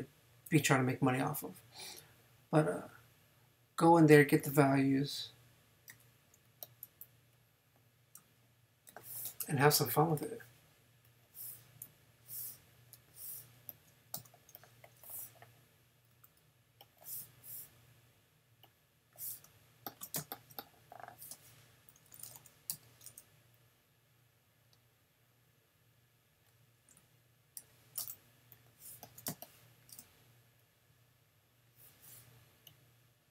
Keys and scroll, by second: 5.9 super+j, 8.9 super+j, 14.1 super+v, 15.0 v, 16.1 x, 17.2 super+x, 20.2 super+space, 21.1 space, 22.7 n, 27.6 super+j, 29.3 super+space.